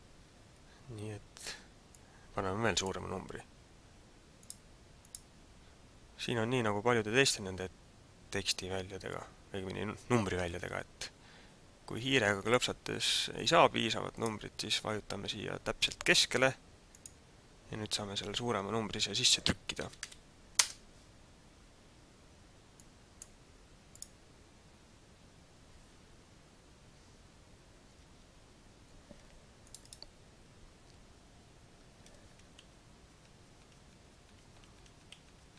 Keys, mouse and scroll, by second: 1.9 click, 4.4 click, 5.0 click, 12.4 click, 13.4 click, 14.1 click, 16.8 click, 22.8 click, 23.9 click.